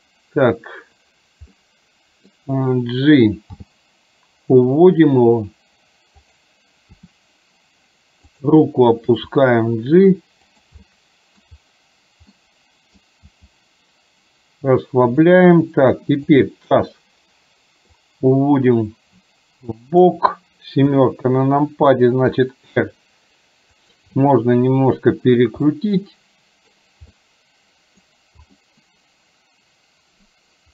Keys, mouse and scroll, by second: 1.6-2.4 middle drag, 3.7 g, 7.1 r, 9.2 g, 10.8-11.6 middle drag, 12.4-13.1 middle drag, 13.3 g, 16.4 click, 18.1-20.2 drag, 20.9 KP_7, 22.4 r, 24.3-25.4 middle drag, 25.8-26.8 middle drag, 27.2-28.2 middle drag, 28.6-30.7 middle drag.